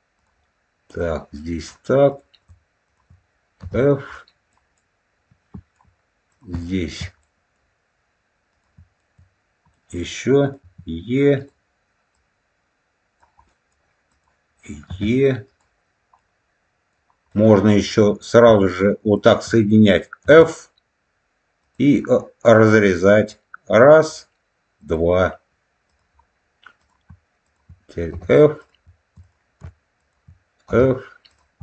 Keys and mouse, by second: 0.1 click, 0.9 click, 2.0 click, 2.7 shift+click, 3.5 f, 4.0 middle click, 4.7 middle click, 6.2 click, 6.6 shift+middle click, 7.1 middle click, 8.4 click, 8.9 shift+middle click, 9.6 middle click, 10.5 e, 11.3 click, 12.0-13.1 drag, 13.4 middle click, 14.0 click, 14.8 e, 15.4 click, 16.1 middle click, 17.2 middle click, 17.7 click, 19.1 shift+click, 20.1 f, 21.5 click, 23.2 click, 24.7 click, 25.9 click, 26.7 click, 27.3 shift+click, 28.0 f, 28.5 click, 29.1 click, 29.9 shift+click, 30.6 f, 31.2 click.